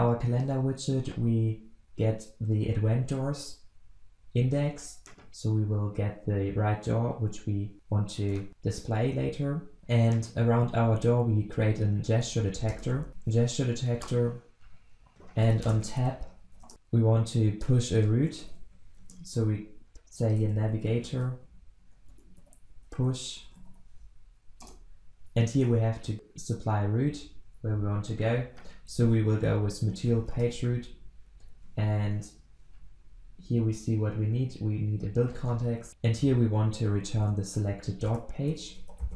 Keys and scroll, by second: 5.3 ctrl+b, 8.2 ctrl+alt+Left, 12.7 alt+Return, 14.0 Return, 16.5 Return, 24.6 Return, 30.3 Return, 39.1 alt+Return.